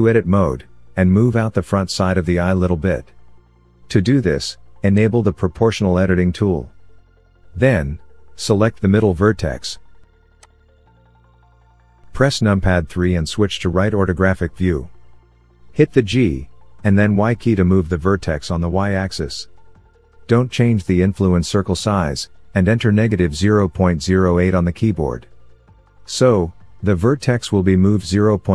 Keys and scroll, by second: 12.2 KP_3, 15.5 g, 15.9 y, 22.6 KP_Subtract, 23.2 KP_0, 23.7 KP_Decimal, 24.1 KP_0, 24.4 KP_8, 25.6 KP_Enter.